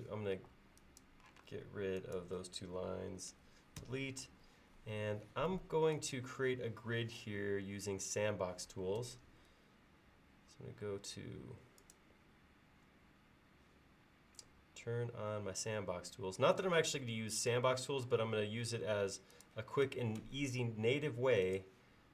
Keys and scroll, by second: 0.4 e, 1.5 space, 3.8 Delete, 9.1 ctrl+s.